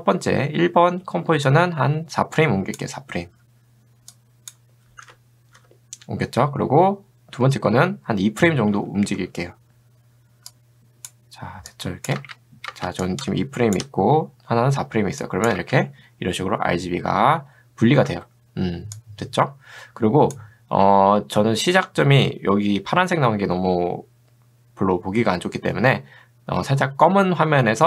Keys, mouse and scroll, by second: 1.5-2.8 drag, 10.5-11.6 drag, 11.9 click, 12.2 space, 12.8 space, 13.1 shift+click, 15.3 click, 15.6 space, 18.1 space, 19.0-20.4 drag.